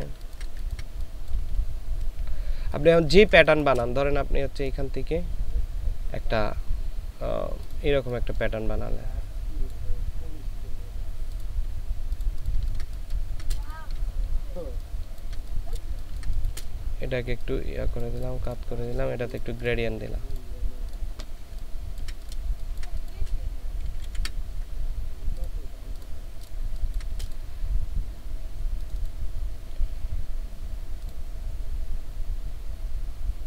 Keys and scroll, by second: 0.0 ctrl+space, 0.6 ctrl+space, 2.7 space, 12.6 ctrl+space, 15.8 ctrl+shift+space, 22.4 ctrl+alt+space, 23.9 ctrl+alt+z, 26.7 ctrl+space.